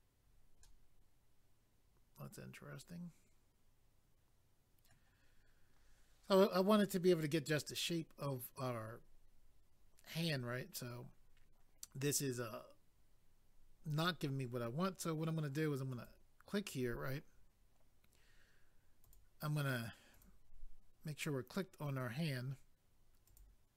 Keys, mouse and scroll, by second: 0.6 middle click, 5.3 scroll down 1, 7.0 scroll up 1, 15.9 click, 16.1 click, 19.0 click, 19.1 click, 20.1 click, 20.2 click, 23.2 click, 23.4 click.